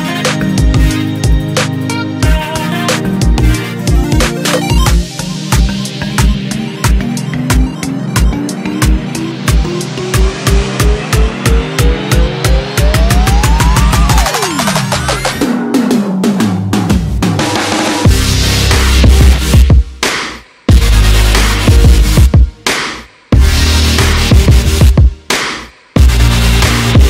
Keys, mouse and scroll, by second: 5.7 e, 7.9 e, 10.1 e, 12.6 r, 16.0 s, 20.0 e, 23.0 ctrl+z, 24.7 e.